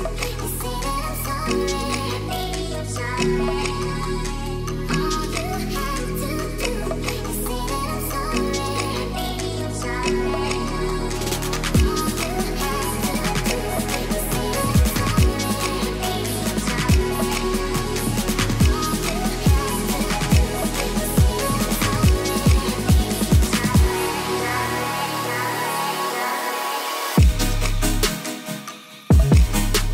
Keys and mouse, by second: 1.2 shift+middle click, 1.9 shift+middle click, 2.7 click, 6.4 shift+middle drag, 6.9 Tab, 8.0 click, 8.6-9.9 drag, 10.2 click, 10.5 Tab, 11.4 shift+middle click, 12.2 click, 12.5 Tab, 14.2 click, 14.7-15.9 drag, 16.2 click, 16.8 ctrl+s, 17.3 middle click, 17.9 Tab, 18.4 middle drag, 18.7 shift+middle drag, 19.9 click, 20.5 shift+middle drag, 21.7-23.3 drag, 24.2 shift+middle click, 25.5 shift+middle click, 26.3 click, 26.5-28.1 drag, 27.6 e, 28.9 click.